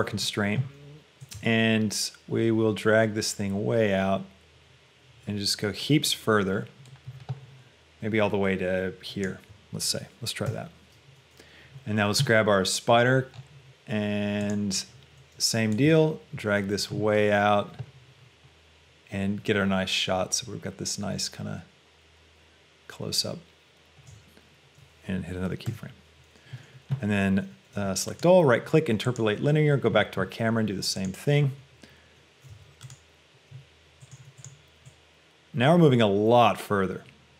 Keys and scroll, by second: 32.7 a.